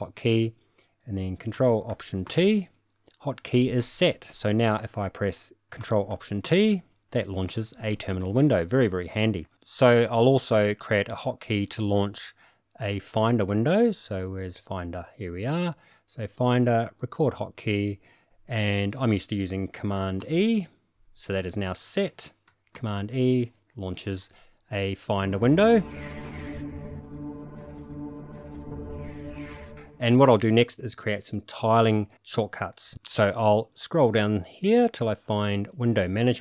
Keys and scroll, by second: 2.2 ctrl+alt+t, 6.4 ctrl+alt+t, 20.2 super+e, 22.7 super+e.